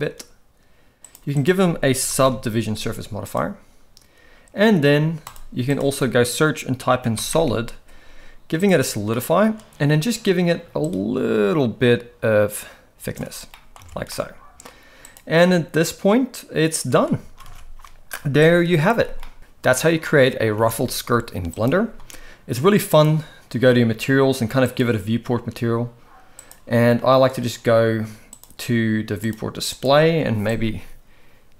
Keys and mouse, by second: 1.1-3.5 drag, 5.3-8.8 drag, 9.1 middle drag, 10.9-13.1 shift+drag, 13.5 middle drag, 13.8 alt+a, 14.1-14.6 middle drag, 15.1-16.9 drag, 17.3 ctrl+s, 17.5 ctrl+s, 18.5 click, 20.0-20.4 middle drag, 20.5 alt+a, 21.5 click, 22.9 click, 24.6-25.2 drag, 26.4 click, 28.3 click, 29.2 click, 29.7 click.